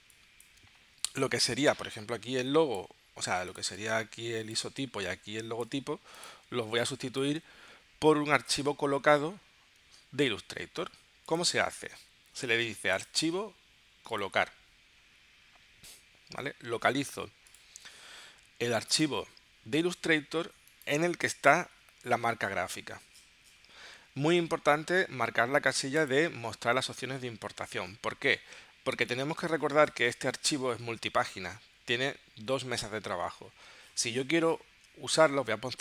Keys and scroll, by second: 6.7 space.